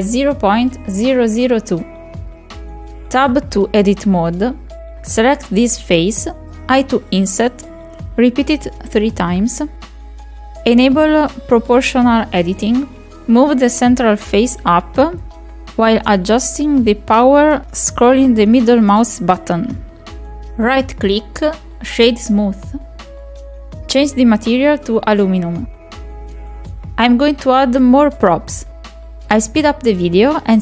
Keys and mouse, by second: 1.1 KP_Decimal, 1.4-1.7 middle drag, 2.0-3.4 drag, 3.1 KP_0, 4.4 click, 5.1 ctrl+a, 5.3 Tab, 6.5 i, 8.9 i, 9.6 i, 12.2-18.6 drag, 18.9 ctrl+z, 19.3-20.0 right drag, 20.0-20.7 middle drag, 21.2 shift+middle click, 23.1 click, 23.6 middle click, 26.1 click, 26.7 click, 28.0 middle click, 28.9 click, 29.1 click, 30.2 click.